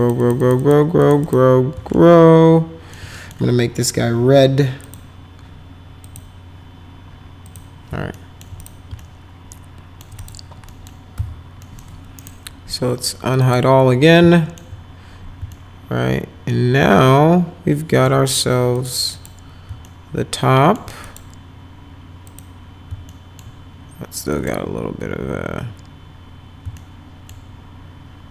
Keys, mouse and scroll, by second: 0.0 click, 0.2 click, 0.4 click, 0.6 click, 1.0 click, 1.2 click, 1.9 alt+middle click, 3.2 middle click, 4.9 click, 6.1 click, 7.5 click, 8.1 alt+middle click, 8.6 click, 9.0 alt+middle click, 10.2 click, 10.7 middle click, 11.2 F4, 11.7 middle click, 12.2 right click, 13.4 click, 14.2 alt+middle click, 15.5-18.1 alt+middle drag, 18.8 click, 19.2 click, 19.9 alt+middle click, 21.0 click, 22.3 click, 23.1 alt+middle click, 24.4 click, 26.8 alt+middle click.